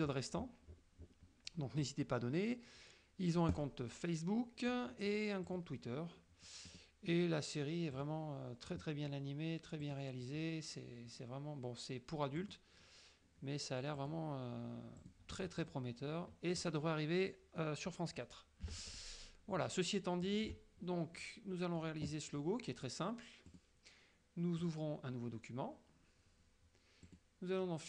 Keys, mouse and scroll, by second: 1.1 scroll up 1, 3.6 click, 5.5 click, 6.8 click, 8.0 click, 10.0 click, 12.5 click, 14.0 click, 15.1 click, 15.7 click, 18.8 alt+Tab, 20.3 alt+click, 21.3 middle click, 23.4 click, 24.7 click, 27.2 click.